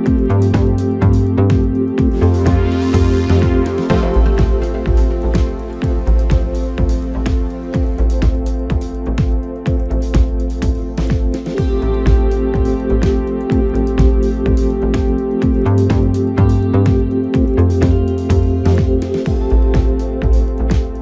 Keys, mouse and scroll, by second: 0.2 drag, 0.6 scroll down 3, 1.5-1.9 drag, 1.9-2.6 scroll down 2, 2.6 click, 4.3 KP_Divide, 5.8 g, 7.9 s, 9.9 g, 12.9 g, 15.6 ctrl+KP_7, 17.3 g, 19.8 KP_7.